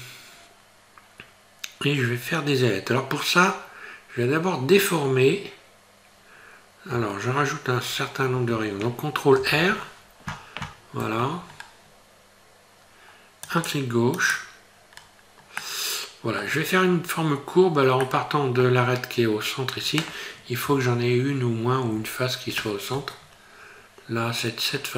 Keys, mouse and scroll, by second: 9.4 ctrl+r, 15.0 scroll down 2, 15.6 middle click, 18.1 middle click, 20.6 KP_1, 21.9 KP_3, 23.4-23.7 scroll up 2.